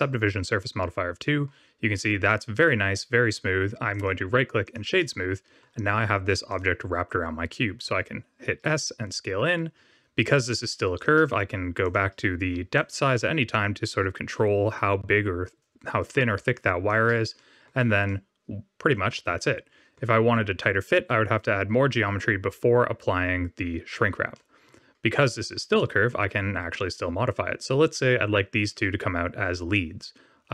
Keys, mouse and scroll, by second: 0.6 middle click, 2.5 right click, 4.6 click, 4.9 middle click, 6.0-6.4 scroll down 1, 6.4 click, 7.8 s, 11.8 click, 12.7 shift+click, 17.3 middle click, 18.0 middle click, 19.3 middle click, 24.3 middle click, 24.9 scroll down 2, 25.7 middle click, 26.4 scroll up 2.